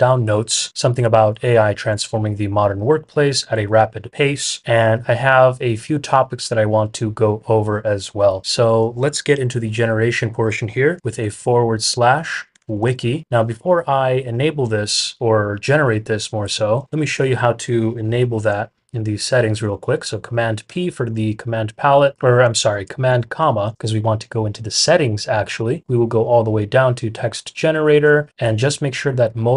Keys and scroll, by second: 11.2-13.3 typing, 16.4-17.4 typing, 20.6 super+p, 22.4 Escape, 23.0 super+,.